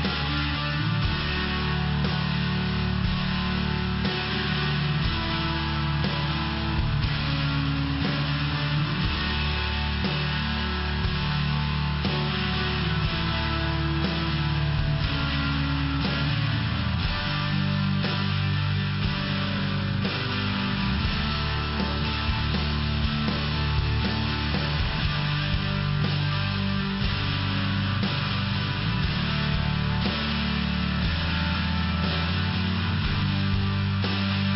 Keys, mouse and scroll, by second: 0.3 click, 4.9 click, 7.9 click, 10.4 click, 15.7 click, 18.8 click, 20.6 click, 24.9 click, 27.9 click, 28.4 click, 28.9 click, 32.7 click, 33.9 click.